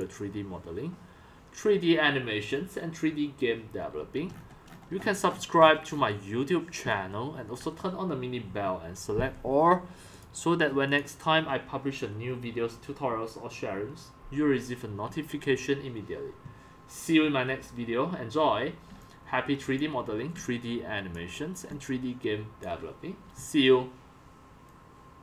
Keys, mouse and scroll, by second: 0.0-2.1 drag, 4.0 x, 4.3-5.0 scroll, 5.0-6.2 scroll up 34, 6.6-7.5 typing, 7.7 click, 10.3 click, 11.0 click, 15.5-15.9 drag, 18.9-22.8 typing, 20.3 click, 21.4 drag.